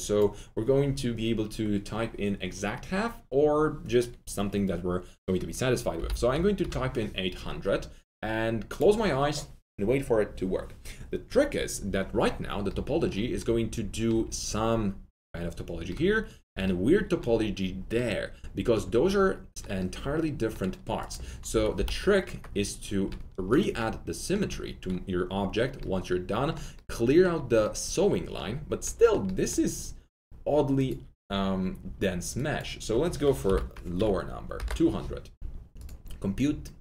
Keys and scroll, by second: 5.7-6.6 typing, 21.4-22.2 typing, 24.4 alt+1, 33.4 Delete, 33.9 2, 34.5 Return.